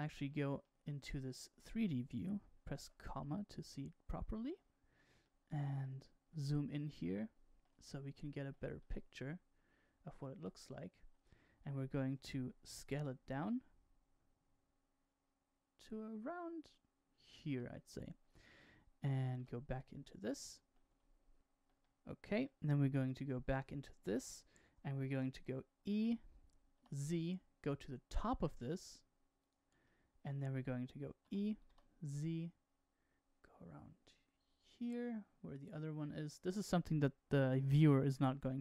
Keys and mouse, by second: 0.0 middle click, 1.0 shift+middle click, 2.7 KP_Decimal, 3.6 middle click, 5.2 middle click, 6.7 shift+middle click, 7.8 middle click, 8.7-10.7 shift+middle drag, 12.9 s, 19.3 KP_1, 21.7 middle click, 22.9 KP_1, 25.5 e, 29.8 shift+middle click, 31.9 e, 36.1 shift+middle click.